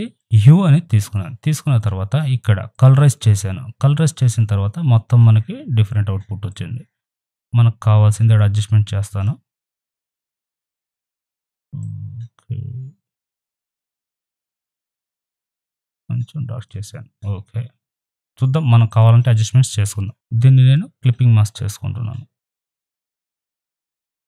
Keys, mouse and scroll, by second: 2.7 click, 6.5-18.9 drag, 18.9 click, 20.1 ctrl+z, 20.6 right click, 24.0 click.